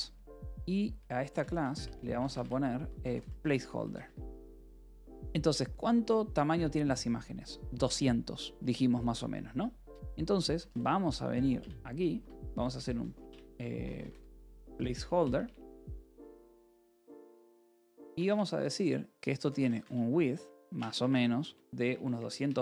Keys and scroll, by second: 0.0-4.4 typing, 5.1 ctrl+s, 9.2-17.7 typing, 11.5 Return, 18.1 Return, 19.0-22.6 typing.